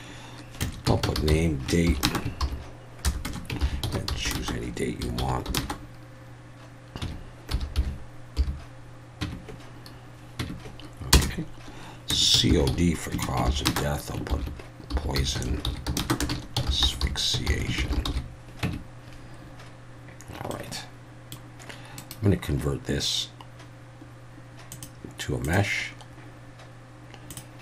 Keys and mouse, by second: 0.9-5.6 typing, 7.0 1, 7.5 9, 7.8 8, 8.4 6, 9.2 Tab, 10.4 Tab, 11.1 Return, 12.3-18.1 typing, 18.6 Tab, 20.5-21.3 middle drag, 22.0-25.5 right drag, 25.5-27.6 drag.